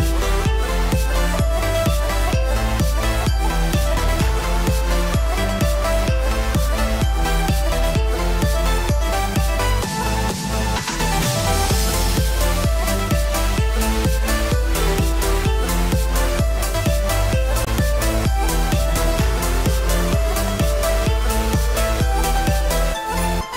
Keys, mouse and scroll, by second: 0.1 middle click, 1.4 click, 2.1 click, 2.8 click, 3.2 click, 3.4 click, 4.3 click, 4.4 click, 4.6 shift+middle click, 4.9 scroll up 2, 5.1 shift+middle click, 5.4 click, 6.2 Tab, 6.4 middle click, 7.3 KP_1, 7.6 shift+middle click, 9.4 alt+click, 9.9 alt+a, 10.2 3, 11.7 alt+click, 14.9 ctrl+KP_Add, 15.6 ctrl+KP_Add, 16.1 ctrl+KP_Add, 16.5 ctrl+KP_Add, 16.9 ctrl+KP_Add, 19.0 middle click, 20.6 ctrl+middle click, 21.1 KP_1, 21.7 shift+middle click, 21.9-22.9 scroll up 1.